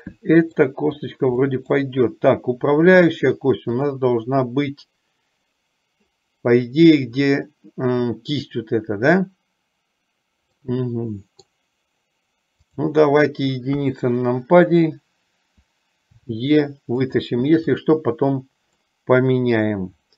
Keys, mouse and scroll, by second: 0.1 middle click, 1.7 middle click, 10.7-11.7 middle drag, 14.0 KP_1, 16.3 e, 17.7 click, 18.8-20.0 middle drag.